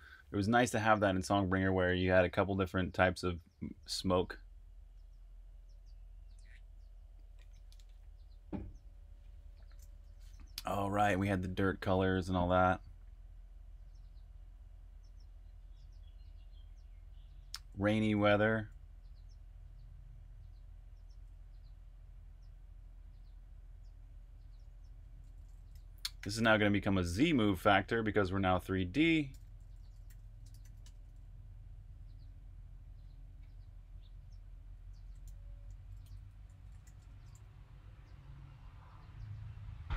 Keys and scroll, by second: 10.1-12.6 typing, 17.5-18.5 typing, 20.5-22.9 typing, 24.4-27.6 typing, 30.1-30.9 typing, 34.5-37.3 typing.